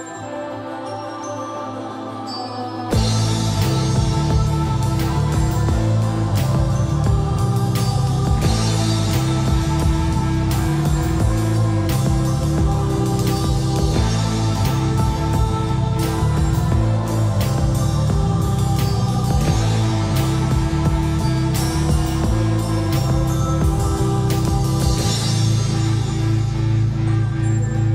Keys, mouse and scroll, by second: 2.4-3.6 typing, 3.1 click, 6.2-7.7 typing, 8.7 typing, 10.2 click, 13.4-13.8 scroll down 1, 13.8-14.5 scroll up 1, 16.7-17.6 typing, 18.4 Escape, 18.9-19.3 typing, 20.5-21.7 typing, 21.9 click, 23.1 typing, 24.2 click, 26.0 e, 26.5 click, 26.8 e, 27.1 space.